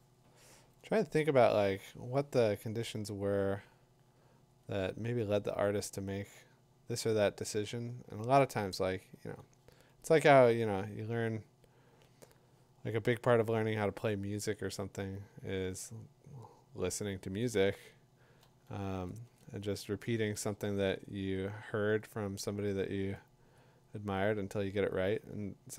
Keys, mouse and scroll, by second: 0.2 ], 0.5 ], 3.8 ], 5.2-8.6 drag, 9.2 [, 16.0-17.7 drag, 18.4 click, 18.7 2, 19.3 3, 19.4 4, 21.7 ], 23.5 click, 25.1 click.